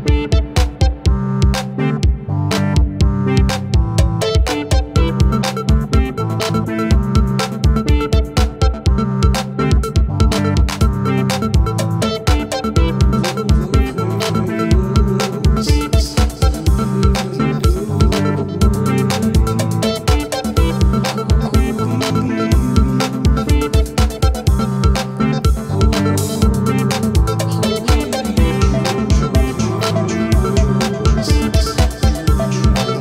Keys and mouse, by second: 1.0-2.2 typing, 3.9 double click, 7.9 alt+click, 8.9 alt+click, 10.5 alt+click, 17.3 right click, 23.1 alt+click, 27.2 ctrl+y, 30.0 ctrl+t, 31.4 right click.